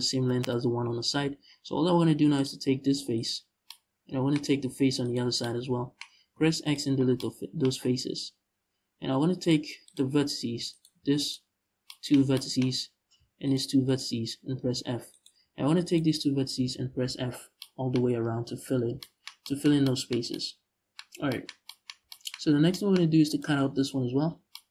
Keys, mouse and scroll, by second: 2.0 click, 2.8 right click, 4.7-5.1 shift+right drag, 5.9 x, 9.0 click, 9.5 click, 10.4 right click, 10.8 shift+right click, 12.4-13.1 scroll up 1, 13.1 shift+right click, 14.3 f, 14.8 right click, 15.5 shift+right click, 16.2 f, 17.0-17.3 scroll down 1, 17.9 Tab, 20.7 scroll down 1, 22.1 scroll up 1, 22.9 right click, 23.9-24.2 scroll down 1, 24.5-24.7 scroll up 1.